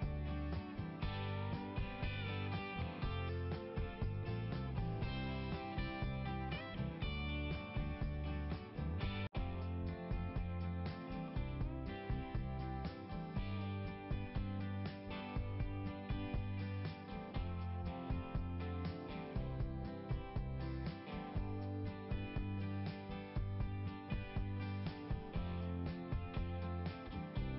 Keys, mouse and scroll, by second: 0.1 click, 4.1-5.1 scroll down 1, 5.1 click, 5.2 click, 6.8 click, 11.6 click, 16.6 click, 16.7 click, 22.3 click, 25.6-26.0 scroll up 1.